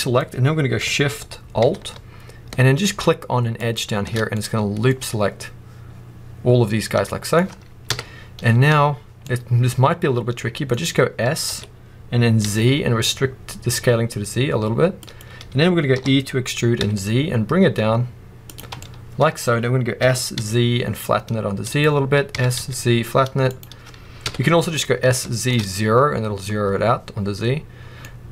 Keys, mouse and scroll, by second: 3.4 alt+shift+click, 4.2 middle click, 5.7-6.2 scroll down 1, 7.0 middle click, 7.8 KP_1, 9.1 middle click, 10.6-11.2 scroll up 1, 11.4 s, 15.1 click, 15.9 e, 18.4 click, 18.7 middle click, 19.9 s, 21.7 click, 22.2 s, 23.5 click, 24.1 KP_1, 25.1 shift+middle click, 25.7 scroll up 1, 27.7 scroll down 1, 27.9 middle click.